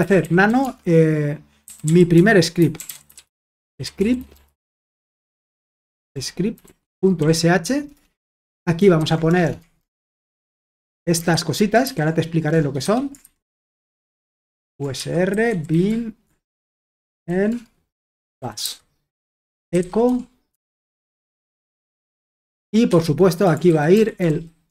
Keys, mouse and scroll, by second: 0.0-20.5 typing, 7.9 Return, 21.8-24.7 typing.